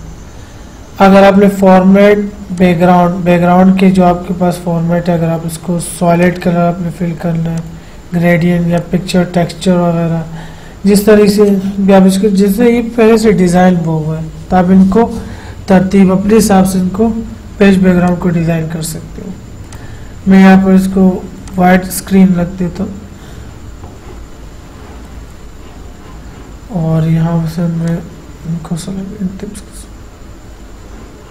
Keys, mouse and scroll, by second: 2.9 click, 6.5 click, 11.7 click, 18.3 click, 28.1 click.